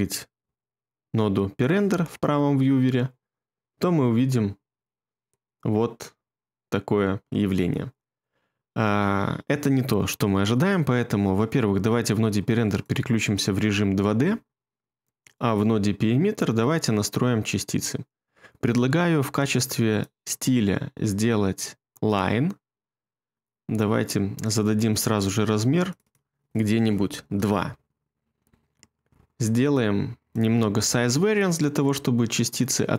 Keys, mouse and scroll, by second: 1.8 2, 27.1 2, 27.6 Return, 31.7 typing.